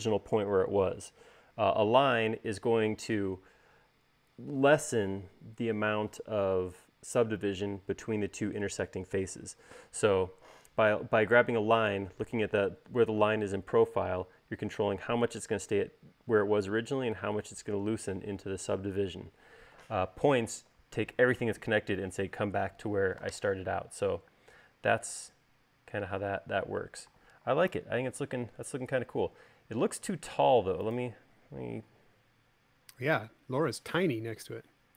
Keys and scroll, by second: 25.1 space, 28.4 u.